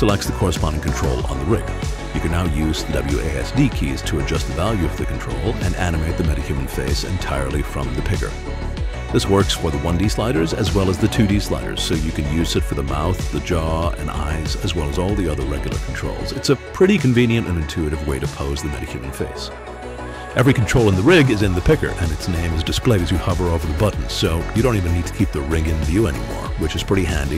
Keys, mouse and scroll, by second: 1.7 click, 3.7-14.8 typing, 12.1 right click, 15.7 click, 15.8-18.7 typing, 21.1-22.2 alt+drag, 24.8-26.7 alt+drag, 26.9 alt+click.